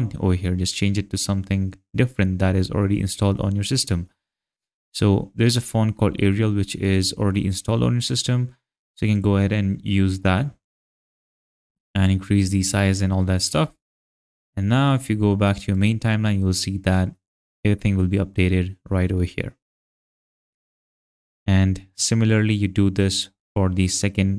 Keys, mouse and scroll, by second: 6.9 click, 9.1 click, 11.4 click, 14.4 click, 16.9 click, 22.4 click.